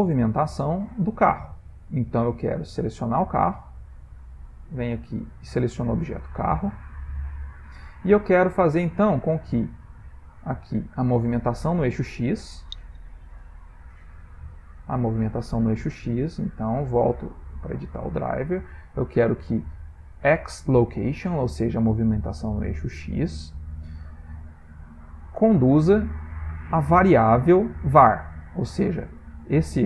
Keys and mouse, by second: 9.2 click, 9.8 middle click, 11.7 click, 15.1 click, 16.4 right click.